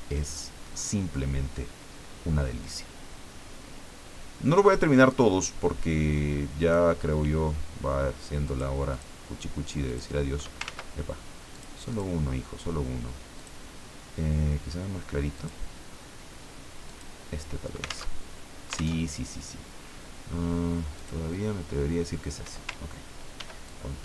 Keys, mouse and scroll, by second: 0.8-1.3 scroll down 1, 2.6-6.9 drag, 8.4 click, 8.9 click, 9.8 click, 10.6 ctrl+z, 11.5 click, 11.9 click, 13.3 click, 15.3 click, 16.9 click, 18.1 alt+Tab, 19.0 alt+Tab, 20.9 click, 23.4 ctrl+d, 23.6-24.0 ctrl+drag.